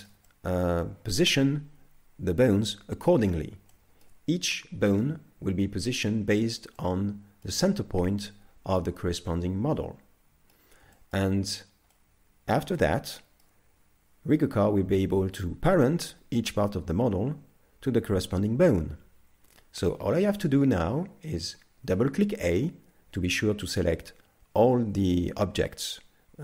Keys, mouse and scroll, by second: 0.3 middle click, 3.1 scroll up 4, 3.7 shift+middle click, 5.0 right click, 6.0 right click, 6.8 middle click, 8.2 middle click, 11.0 shift+middle click, 11.4 scroll down 3, 11.9 middle click, 13.2 shift+middle click, 19.5-19.9 scroll down 1, 19.9 shift+middle click, 21.9 a, 22.0 a.